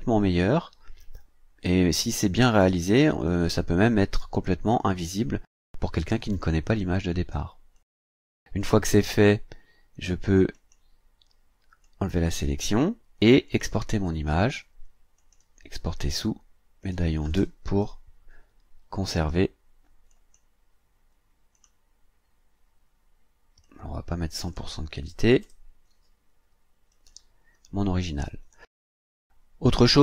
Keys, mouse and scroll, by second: 7.7 click, 10.5 click, 11.8 click, 13.5 click, 15.2 click, 16.8 click, 17.8 KP_2, 20.1 click, 21.5 click, 23.6 click, 25.1 KP_9, 25.4 KP_5, 26.9 click.